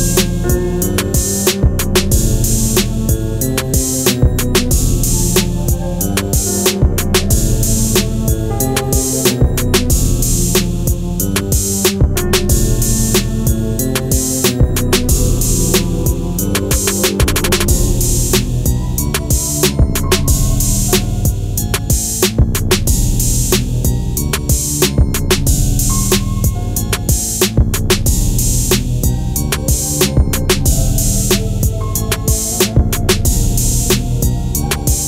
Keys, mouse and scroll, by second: 1.2-1.9 scroll down 1, 5.5 typing, 5.6 click, 11.3 click, 16.0-21.7 drag, 21.7-23.9 scroll down 1, 25.4 click, 26.8-28.0 scroll up 1, 28.0-32.8 drag, 32.8-33.9 scroll down 1.